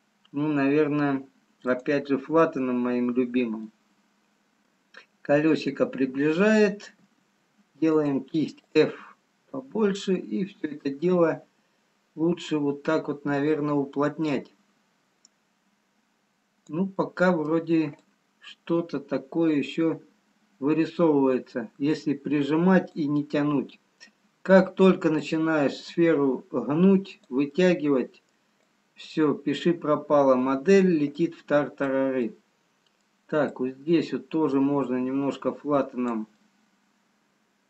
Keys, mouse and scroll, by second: 3.3 click, 3.3 middle click, 3.9 middle click, 3.9-4.6 scroll down 1, 5.6-6.1 scroll down 1, 7.3 f, 9.3 click, 17.1 middle click, 18.9 click, 23.4 middle click, 24.8-25.2 scroll down 2, 26.2 click, 27.7 middle click, 28.8 click, 31.4 click, 34.7 middle click, 34.7 click, 36.5 middle click.